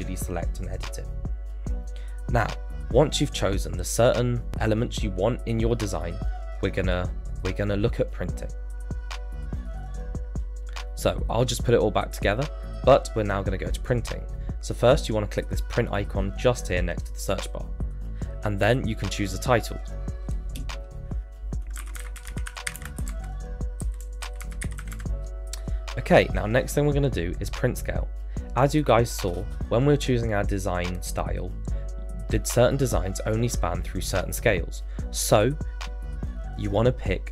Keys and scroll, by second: 17.4 Return, 21.5-25.3 typing.